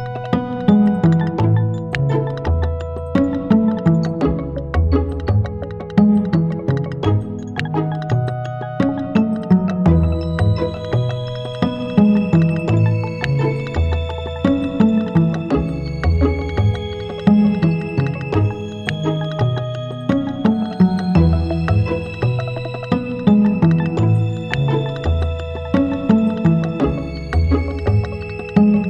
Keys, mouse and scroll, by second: 1.2 right click, 2.5 click, 3.7 click, 5.2 click, 7.9 right click, 9.8 click, 11.1 click, 12.3 click, 14.6 click, 15.2 right click, 16.0 KP_0, 17.0 scroll down 1, 18.2 right click, 18.6 click, 18.6 g, 20.2 right click, 21.3 g, 22.4 click, 23.0 right click, 23.6 g, 24.1 click, 24.8 right click, 25.2 g, 25.7 click, 26.2 right click, 26.6 g, 27.7 right click, 28.1 g.